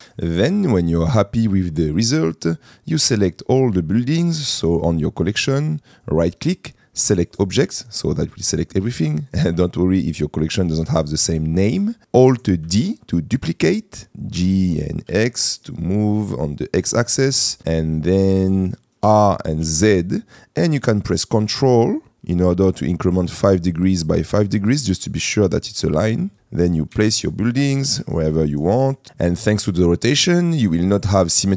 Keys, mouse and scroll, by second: 0.0 click, 0.0 n, 2.3 middle click, 2.4 click, 6.1-7.6 right drag, 8.2 middle click, 9.2 middle click, 11.8 middle click, 13.3 alt+d, 14.4 g, 15.2 x, 16.8 click, 17.6 middle click, 19.2 r, 19.7 z, 27.0 g, 28.0 shift+z.